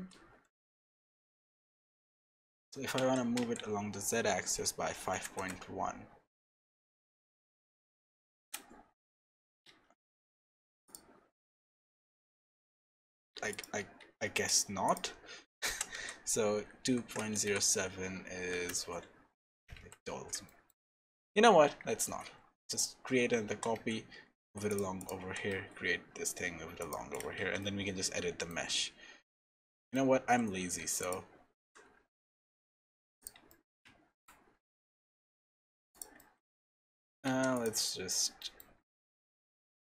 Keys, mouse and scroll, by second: 8.9-9.5 scroll down 10, 9.7 ctrl+z, 10.0-10.8 scroll up 9, 10.8 click, 15.7 g, 19.8 ctrl+z, 20.1-20.5 scroll up 2, 20.5 shift+middle click, 22.0 alt+d, 23.5 g, 25.0 click, 25.3 g, 27.1 click, 27.4 Tab, 27.6 middle click, 30.0 z, 30.8 3, 31.0 click, 31.5 g, 33.5 middle click, 33.8 z, 34.5-35.3 scroll down 3, 35.4 scroll down 1, 35.9 click, 36.2 middle click, 36.5 Tab, 37.0 Tab, 37.2 3, 37.5 click, 37.8 middle click, 39.7 g.